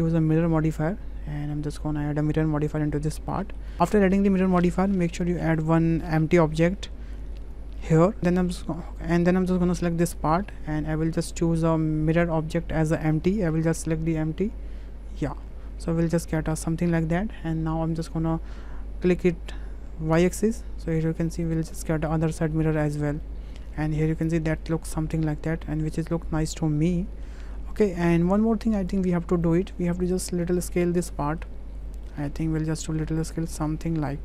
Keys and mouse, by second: 0.3 click, 0.4-2.8 middle drag, 3.4 shift+middle drag, 5.4 shift+a, 8.0 click, 12.2-15.3 drag, 15.9-16.5 middle drag, 20.1 click, 21.0 middle click, 21.8 middle drag, 22.5-23.0 middle drag, 23.2-27.2 middle drag, 27.5-28.0 middle drag, 28.9-29.7 shift+drag, 31.0-31.4 drag, 32.1 click, 32.9-34.2 drag.